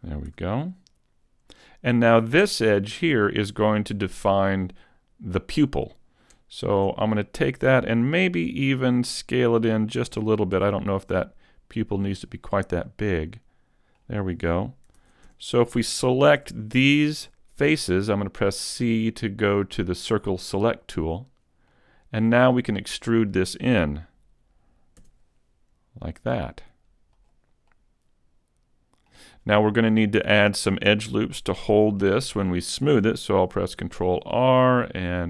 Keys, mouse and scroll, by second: 0.3 a, 0.7 middle click, 2.4-3.1 scroll up 2, 6.6 alt+right click, 8.3 middle click, 10.6 s, 12.2 click, 12.5-12.9 scroll down 1, 12.9 middle click, 15.0 ctrl+Tab, 17.7 c, 21.2-21.7 scroll up 1, 21.7 middle click, 25.1 e, 27.3 click, 27.7 middle click, 29.3-29.7 scroll up 1, 29.7 middle click, 31.1 middle click, 31.8 shift+middle click, 32.3 shift+middle click, 33.8 ctrl+r.